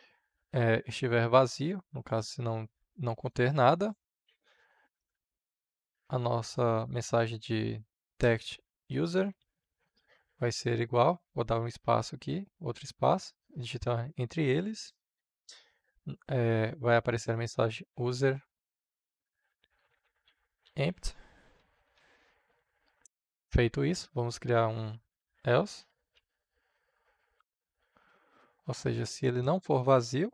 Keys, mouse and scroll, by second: 0.3 Right, 1.4 /, 2.6-4.8 drag, 4.8 Return, 6.5-7.8 typing, 8.2 Return, 8.9 space, 9.4 space, 10.2 shift+~, 11.0 space, 12.8 Left, 16.7-21.4 typing, 21.9 Right, 23.0 Return, 25.3-27.3 typing, 29.1 Return.